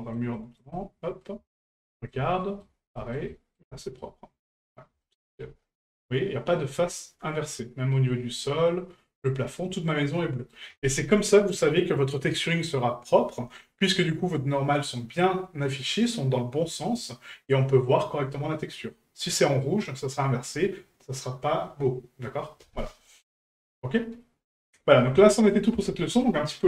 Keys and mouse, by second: 0.3 shift+middle drag, 0.7-1.2 middle drag, 1.5 shift+middle drag, 1.9 middle drag, 2.4 shift+middle drag, 3.0 shift+middle drag, 3.3 middle drag, 3.8 shift+middle drag, 5.0-5.3 shift+middle drag, 6.8-10.5 middle drag, 23.3-24.7 middle drag.